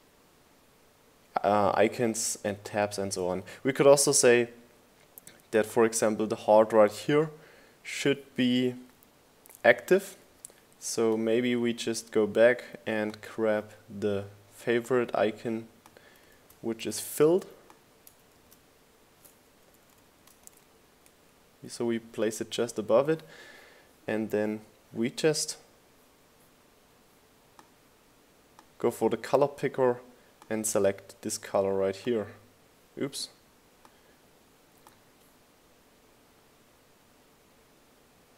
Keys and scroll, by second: 15.9 super+c, 17.9 super+v, 18.7 shift+Up, 19.3 Down.